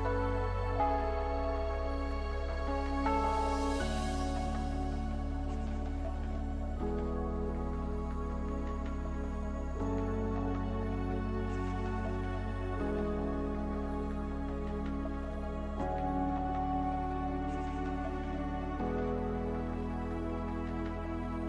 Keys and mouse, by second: 2.0 Tab, 2.6 middle click, 3.4-5.2 drag, 7.5 r, 10.3-16.2 drag, 12.5 right click, 13.8 g, 15.9 right click, 17.1 click, 17.4 g, 19.0 g, 20.3 Tab.